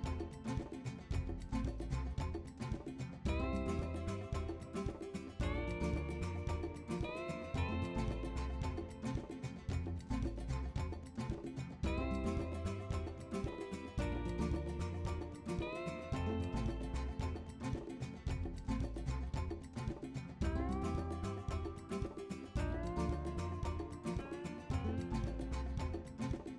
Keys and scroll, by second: 1.1 b, 1.2 b, 4.2 typing, 7.4 typing, 10.0-10.7 typing, 12.5 2, 12.6 2, 15.1 o, 17.6 super+c, 17.7 super+v, 19.5 super+c, 19.6 super+v, 24.7 1, 24.8 1, 26.4 super+c, 26.5 super+v.